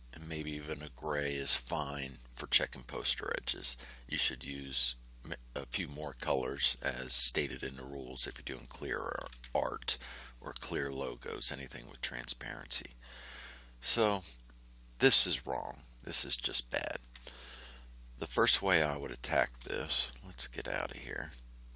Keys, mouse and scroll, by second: 3.7-4.4 scroll up 1, 4.4 click, 4.9-6.8 middle drag, 7.2-8.4 middle drag, 13.7 ctrl+scroll up 1, 14.6 ctrl+scroll down 1, 15.9 ctrl+scroll up 1, 16.6 ctrl+scroll down 1, 20.5 ctrl+z.